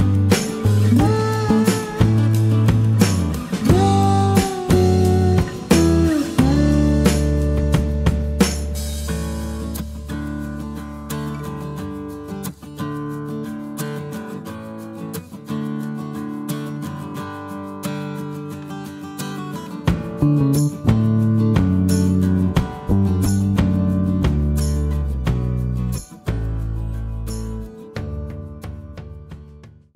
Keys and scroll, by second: 3.7 ctrl+0.